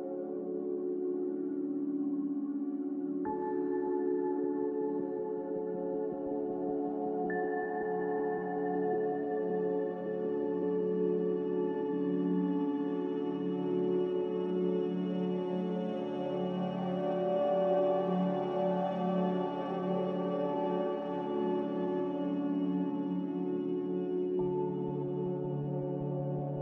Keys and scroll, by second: 20.6 ctrl+z.